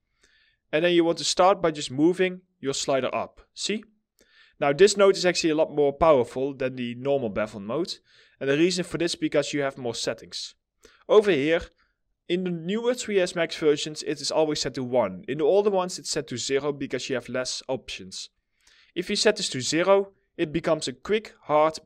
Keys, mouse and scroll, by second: 5.6 alt+middle click, 6.4-6.7 scroll up 1, 6.7 middle click.